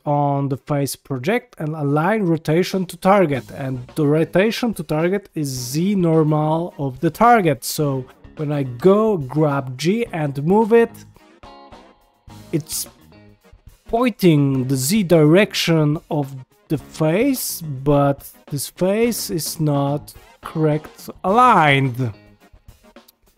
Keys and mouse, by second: 7.2 middle click, 8.7 g, 13.7 g, 17.6-20.5 middle drag, 20.5 shift+middle click, 21.8-23.3 middle drag.